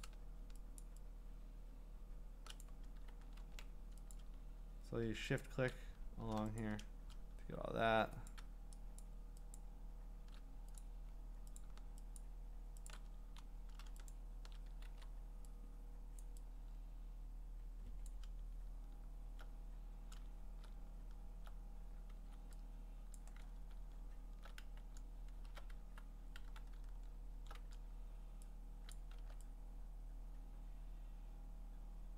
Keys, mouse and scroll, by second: 0.0 click, 0.8 shift+click, 2.6 click, 3.4 ctrl+z, 4.1 click, 5.4 click, 6.6 click, 8.3 click, 9.0 shift+click, 9.6 shift+click, 10.8 click, 11.6 click, 12.2 shift+click, 12.9 shift+click, 14.1 shift+click, 14.9 ctrl+z, 16.2 click, 18.1 click, 22.2 x, 23.2 click, 23.7-25.8 scroll, 26.0-26.4 scroll, 26.9-27.6 scroll, 28.9 click, 29.2 x.